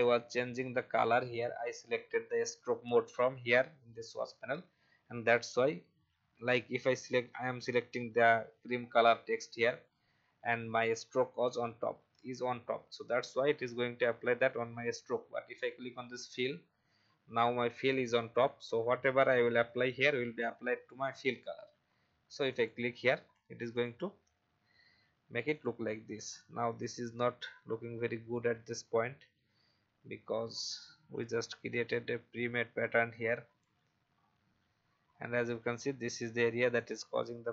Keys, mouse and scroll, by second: 9.3 alt+scroll up 1, 16.2 click, 24.7-25.5 alt+scroll down 1, 25.5 click, 26.2 alt+scroll up 1, 28.5 alt+scroll down 1, 30.4 click, 33.1 alt+scroll down 1, 34.0 alt+scroll up 1, 35.0 alt+scroll up 1, 36.7 click.